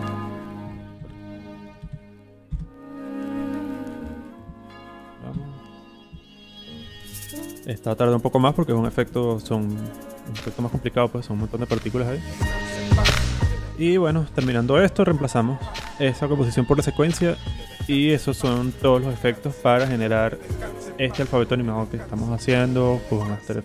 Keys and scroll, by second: 0.4-2.4 typing, 2.4 Return.